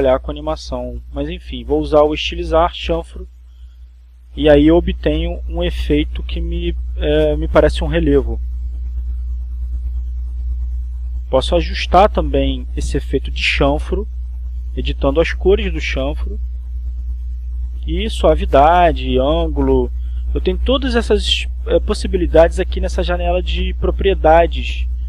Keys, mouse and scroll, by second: 5.5 click, 7.7 click, 8.5-9.5 drag, 10.4 click, 12.1 click, 12.7 click, 13.9 click, 17.6-18.5 drag, 19.1-20.2 drag, 20.7 click, 24.6 click.